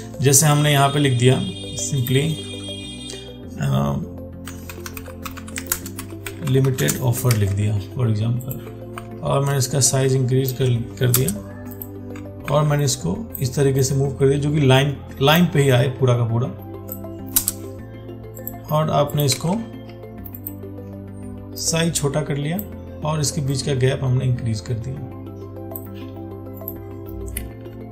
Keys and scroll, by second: 7.6 ctrl+a, 9.2 ctrl+t, 12.7 ctrl+t, 19.6 ctrl+a.